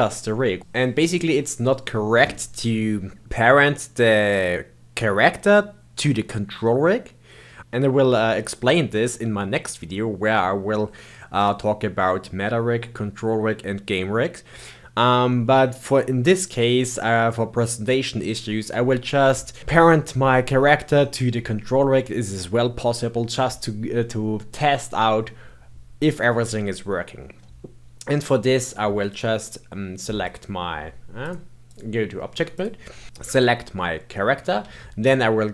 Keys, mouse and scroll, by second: 19.6 click, 21.0-24.0 middle drag, 24.5-29.0 middle drag, 29.0 click, 30.2 click, 31.1-32.6 drag, 33.3 click.